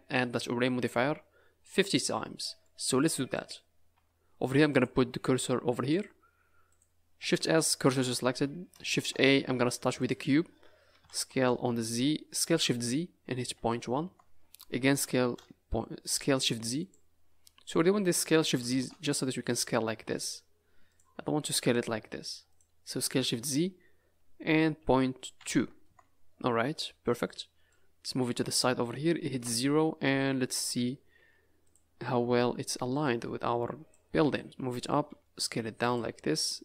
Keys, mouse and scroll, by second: 2.3 middle click, 2.9 scroll up 4, 3.3 click, 3.9 Tab, 4.2 scroll up 2, 4.7 click, 5.9 click, 6.8 click, 7.3 shift+s, 8.3 Tab, 8.9 shift+a, 10.9 s, 14.8 s, 17.3-17.8 scroll down 3, 18.4 s, 21.4 s, 23.0 s, 26.7 scroll up 4, 27.7 click, 29.3 KP_0, 30.3-30.7 scroll down 5, 30.7-31.1 scroll up 3, 31.1 z, 32.0 scroll up 3, 33.0 click, 34.4 click, 35.0 s, 36.2 scroll up 3.